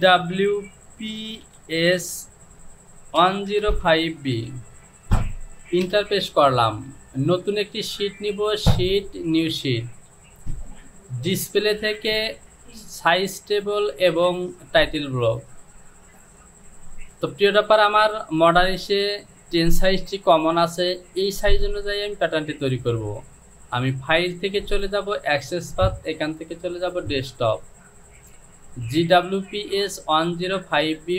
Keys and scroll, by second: 2.5 KP_1, 2.8 KP_0, 3.2 KP_5, 3.7 b, 5.2 Return.